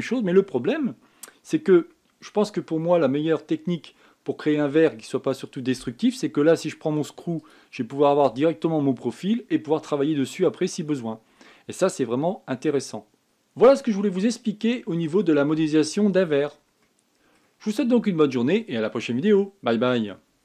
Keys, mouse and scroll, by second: 3.6-4.1 scroll down 2, 4.1-4.9 scroll up 1, 4.9-6.7 scroll down 2, 6.7-7.2 scroll down 1, 7.2-8.1 scroll up 1, 8.1 click, 9.6-10.0 scroll down 1, 10.0 scroll up 4, 12.0-12.7 scroll up 10, 13.2-13.6 scroll down 10, 13.6 click, 14.8-16.3 middle drag, 16.3-16.7 scroll down 1, 16.7-17.6 scroll up 6, 17.6-20.4 middle drag.